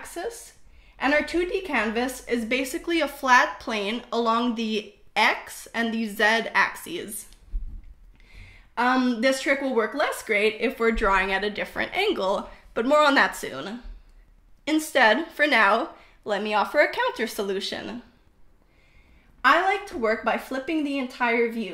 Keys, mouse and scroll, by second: 0.9-3.0 drag, 4.0 KP_0.